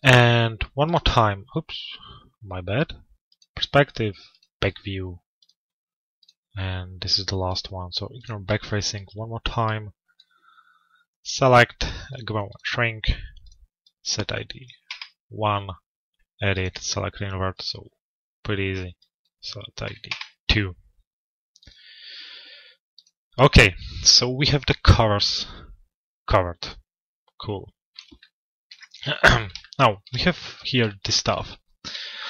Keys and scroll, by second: 14.5 Return, 19.7 Return, 24.0 p.